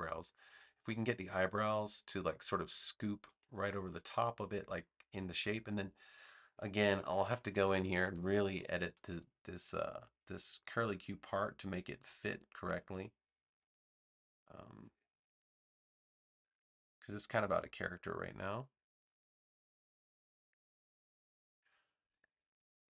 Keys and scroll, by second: 6.9 super+=, 7.9 space, 12.6 a.